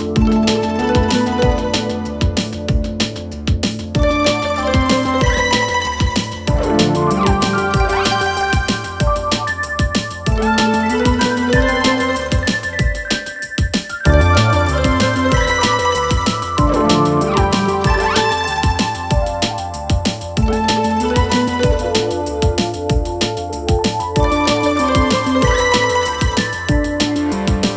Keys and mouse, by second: 0.1 click, 0.3 click, 1.4-4.1 drag, 4.5-4.9 middle drag, 5.5-6.4 middle drag, 7.5-8.2 middle drag, 8.9 shift+middle drag, 9.2-9.5 middle drag, 10.2 click, 12.3-13.9 drag, 15.0 click, 17.2-18.0 middle drag, 19.0-19.8 middle drag, 20.5-21.4 middle drag, 21.8-22.4 middle drag, 22.6 shift+middle drag, 23.3 middle click, 24.0 shift+middle drag, 25.2 middle drag, 25.8 click, 26.3 Tab, 27.3 2.